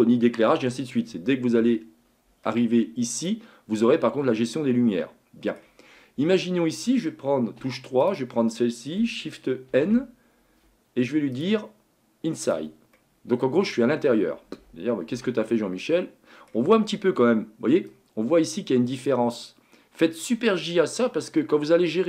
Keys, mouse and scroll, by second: 3.6 click, 4.6-7.6 middle drag, 7.6 3, 8.0 click, 9.7 shift+n, 11.3-12.5 drag, 13.0-15.1 middle drag, 15.1 Tab, 15.5-16.8 middle drag, 16.8-17.9 scroll up 2, 17.9-20.9 drag, 20.9-21.4 scroll down 3, 21.4-22.0 middle drag.